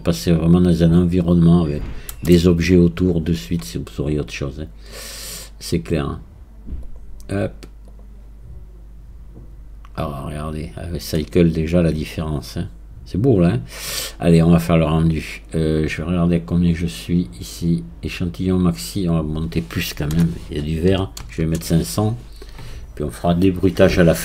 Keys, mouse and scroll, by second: 15.9-18.3 scroll down 1, 18.3-19.0 scroll down 1, 19.0-21.4 drag, 21.4 KP_0.